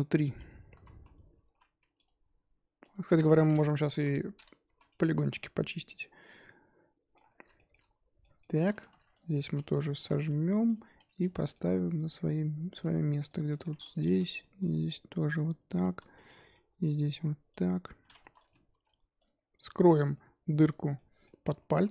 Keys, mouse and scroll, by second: 0.1 scroll up 2, 0.2 Tab, 0.8 z, 1.4 ctrl+r, 3.1 z, 3.3 middle click, 3.9 KP_1, 4.7 s, 5.3-7.3 middle drag, 7.3 scroll down 2, 7.5 shift+middle drag, 7.7-8.2 scroll up 2, 8.2-9.2 middle drag, 9.2 alt+click, 9.3-9.9 middle drag, 9.9 s, 11.3 middle click, 11.7 g, 13.5 middle click, 14.1 click, 14.5 g, 16.2 click, 16.3 middle click, 16.7 g, 18.2 1, 18.4 click, 18.7 g, 19.8 click, 20.0 g, 20.9 middle click, 21.8 2.